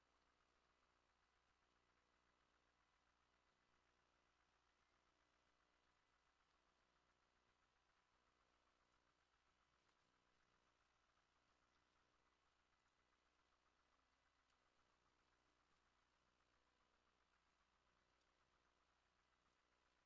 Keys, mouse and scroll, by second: 0.0-10.1 drag, 0.3 shift+middle click, 4.9 middle click, 6.2 shift+middle click, 8.0 middle click, 8.6-9.3 scroll down 2, 9.7 ctrl+middle click, 9.9 ctrl+s, 10.4 scroll up 1, 10.6 shift+middle click, 11.2 shift+middle click, 13.3 scroll down 1, 13.5 shift+middle click, 14.4 scroll up 1, 14.6 shift+middle click, 16.8 middle click, 18.3 scroll down 1, 18.3 shift+middle click, 19.9 middle click.